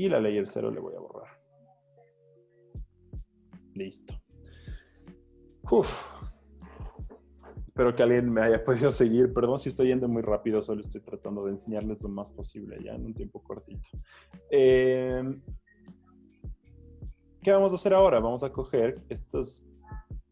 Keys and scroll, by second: 0.7 BackSpace, 1.2 z, 2.2 z, 4.0 z.